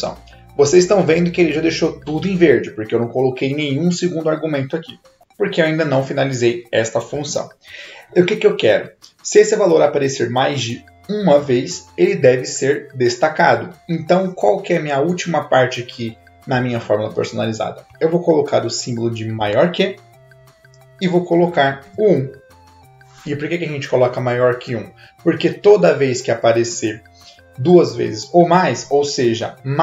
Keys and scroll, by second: 19.4 shift+., 21.8 1.